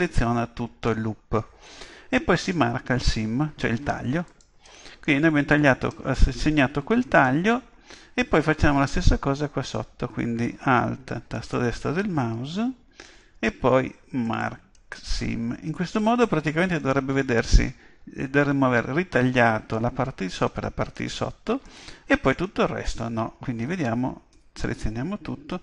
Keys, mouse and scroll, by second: 0.0-1.9 middle drag, 4.3-6.1 drag, 5.0-8.2 middle drag, 11.3-13.2 right drag, 14.2-16.1 drag, 15.2-24.2 middle drag, 23.7 a, 24.3 a.